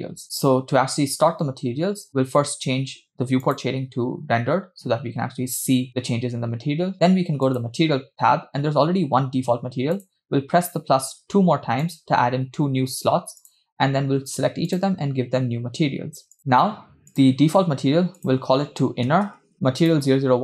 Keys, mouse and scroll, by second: 3.8 click, 7.5 click, 8.2-9.2 scroll up 2, 10.0 click, 11.9 click, 13.5-15.8 drag, 16.4-16.7 drag, 17.2-17.8 drag, 18.2-19.5 drag, 19.4 n.